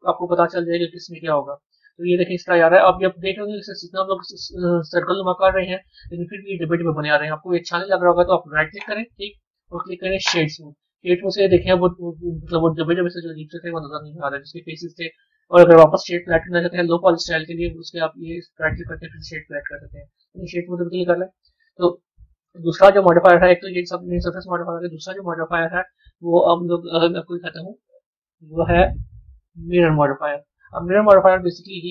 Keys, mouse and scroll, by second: 0.5-2.0 drag, 2.0-3.2 middle drag, 3.2 scroll up 1, 4.0-7.0 middle drag, 8.7 right click, 10.9-15.0 middle drag, 15.0-24.2 right drag, 24.2 click, 24.8 click, 30.8 scroll down 2.